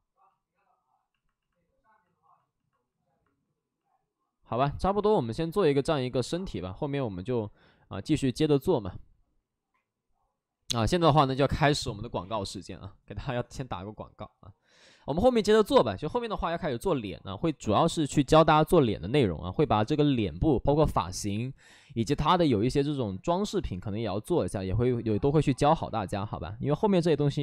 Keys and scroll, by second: 5.6 space.